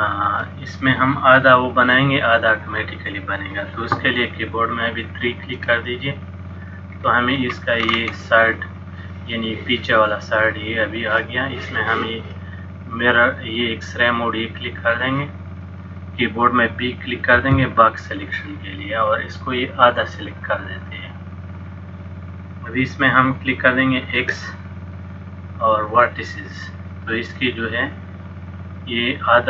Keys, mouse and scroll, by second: 5.6 KP_3, 7.0-7.4 scroll down 2, 7.4-8.8 scroll up 8, 14.9 click, 15.6 click, 17.5 b, 24.2 x, 27.5 middle click.